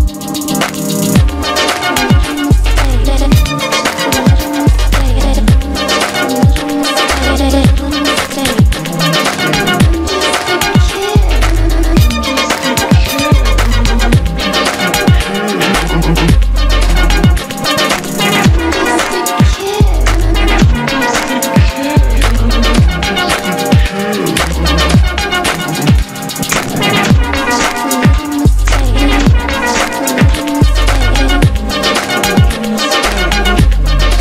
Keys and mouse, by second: 2.7 a, 4.5 Tab, 4.8 ctrl+t, 5.7 middle click, 6.4 z, 10.6 a, 13.0 z, 13.4 middle click, 14.7 middle click, 15.2 click, 15.9 middle click, 16.2 Tab, 16.3 q, 17.6 middle click, 18.2 z, 18.7-20.0 middle drag, 20.4 z, 21.1 middle click, 21.4 a, 22.5-24.1 middle drag, 24.1-27.1 typing, 24.6 middle click, 27.5 middle click, 27.6 ctrl+a, 28.1-30.3 middle drag, 30.5 z, 31.6 middle click, 31.7 g, 32.9 z, 33.0 r, 33.5 middle click, 33.6 r.